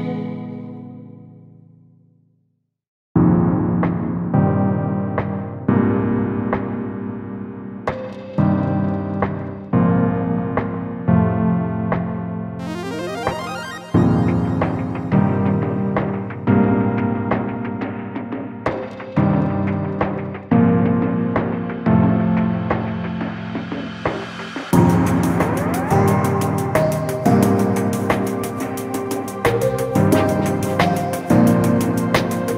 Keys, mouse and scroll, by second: 1.5 scroll down 1, 2.2 click, 4.4 Tab, 5.0 click, 6.4 click, 6.6 Tab, 7.0-7.3 scroll up 1, 7.8 alt+click, 8.8 ctrl+e, 9.2 a, 9.5 alt+click, 9.9 ctrl+e, 10.4 scroll down 1, 11.0 scroll up 1, 11.4 alt+click, 11.7 ctrl+e, 11.9 alt+click, 12.2 ctrl+e, 12.6 alt+click, 13.6 alt+shift+click, 14.5 ctrl+e, 14.6-19.2 typing, 15.6 scroll down 1, 15.7 Tab, 16.0 click, 17.3 ctrl+click, 17.8 ctrl+click, 18.8 Tab, 19.1 alt+h, 19.3 click, 19.6 shift+click, 20.3 scroll down 1, 20.7 scroll up 1, 20.9 scroll down 1, 22.5 click, 23.0 scroll down 1, 24.1 scroll up 1, 24.6 scroll up 1, 25.0 scroll down 1, 26.2 scroll up 1, 26.3 ctrl+5, 26.4 click, 26.5 Tab, 26.9 click, 27.2 ctrl+KP_Add, 28.2 click, 29.4 Tab, 29.6 scroll down 1, 30.2 scroll down 1, 30.8 scroll up 1, 31.0 click, 31.2 ctrl+KP_Add, 32.0 click, 32.3 Tab, 32.4 scroll down 1, 32.4 alt+a.